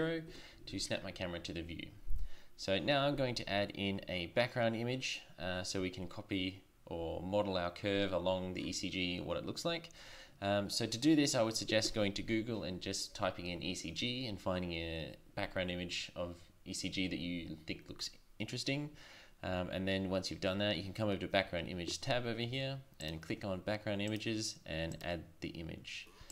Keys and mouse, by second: 23.0-26.3 drag.